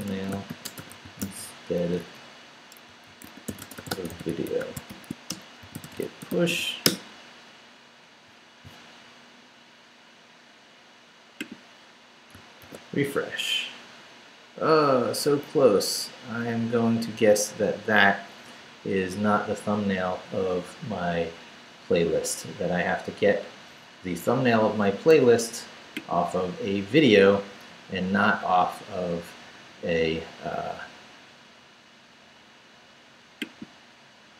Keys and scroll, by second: 0.0-7.0 typing, 12.6 super+r.